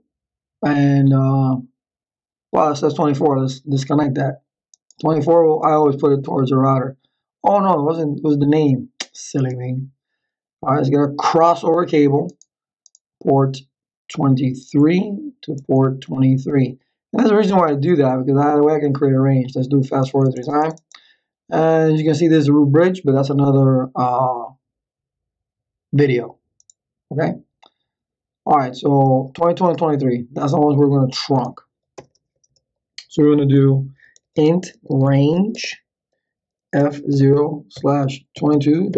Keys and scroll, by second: 32.0 Return, 33.8-38.9 typing.